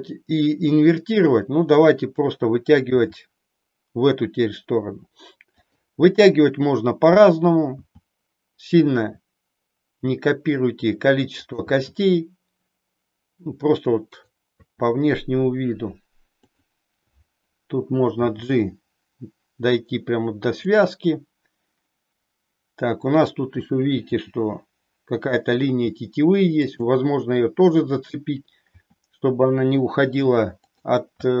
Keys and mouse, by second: 3.0 e, 5.6 click, 7.7 e, 11.7 e, 14.6 e, 16.5 click, 18.1 g, 24.2 g, 28.7 e, 30.8 click, 31.2 e.